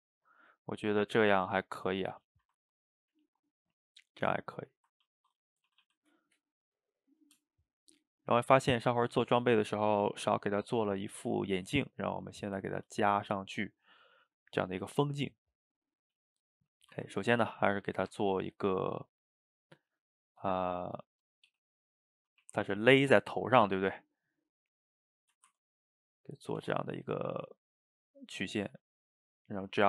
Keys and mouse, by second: 1.3 shift+right click, 1.6-5.1 ctrl+middle drag, 5.1 ctrl+s, 5.6 shift+middle click, 5.7 a, 5.8 a, 6.0-10.5 middle drag, 11.8-12.4 middle drag, 12.4 shift+right click, 12.7-16.1 ctrl+middle drag, 16.4-16.8 shift+middle drag, 16.8 shift+right click, 17.2-18.0 ctrl+middle drag, 18.0 shift+a, 20.5-21.5 middle drag, 21.5 g, 22.4 r, 23.8 g, 25.2 shift+middle drag, 25.5 Tab, 26.0-26.6 middle drag, 26.6 Tab, 28.0 drag, 29.4 click, 29.7-29.8 middle drag.